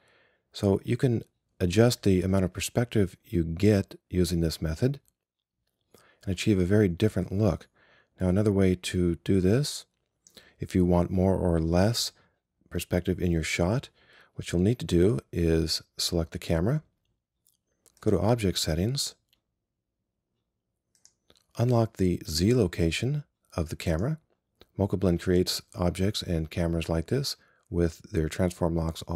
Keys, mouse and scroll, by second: 13.4-21.1 drag.